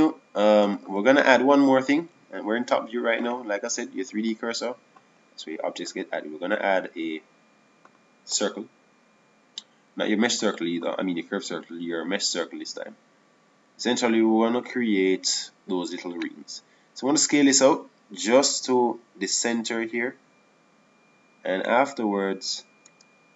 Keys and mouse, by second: 7.3-9.2 drag, 19.3 s, 22.9-23.3 drag.